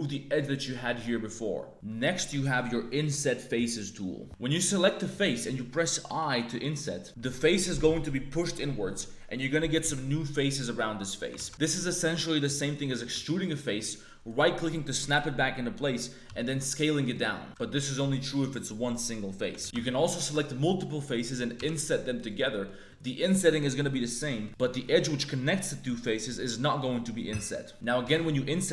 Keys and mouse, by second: 1.7 3, 4.2 3, 4.2 a, 6.0 i, 11.3 ctrl+z, 11.5 e, 13.1 e, 16.4 s, 19.6 ctrl+z, 19.7 ctrl+z, 19.7 3, 20.0 shift+click, 20.4 click, 21.5 i, 22.4 click, 24.3 click, 24.4 ctrl+z, 24.8 click, 25.8 click, 27.7 click.